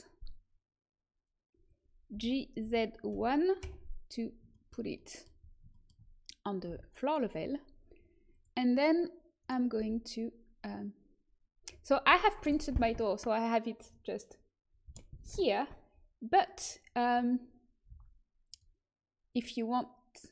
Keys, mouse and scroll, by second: 2.1 g, 6.6 KP_1, 8.3 click, 9.4 click, 9.4 right click, 9.7 g, 10.1 click.